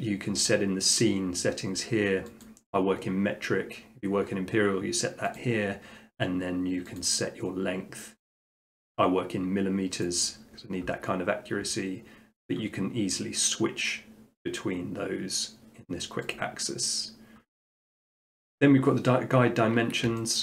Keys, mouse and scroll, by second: 2.4-3.5 drag, 5.4-6.4 drag, 7.0-8.1 drag, 10.2-11.4 drag, 12.5-13.6 drag, 16.3-17.4 drag, 18.7 scroll, 19.0 middle click, 19.5-20.1 scroll, 20.3-20.4 shift+middle click.